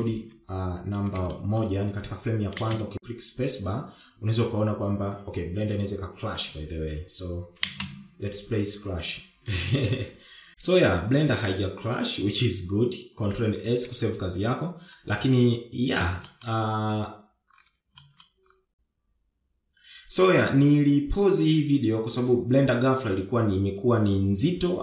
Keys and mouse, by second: 1.7 shift+Left, 3.2 shift+middle drag, 4.4 space, 15.7 ctrl+s, 16.9 click, 18.3 shift+middle click, 19.7 click, 20.5 shift+z.